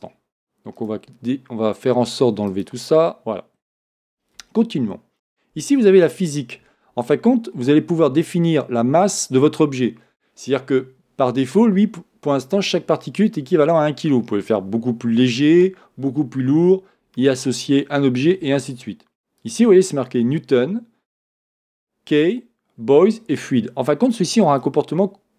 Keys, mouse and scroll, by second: 0.8 click, 2.5-5.4 drag, 3.6-4.5 scroll down 1, 5.8-6.3 scroll down 1, 19.4-25.3 drag.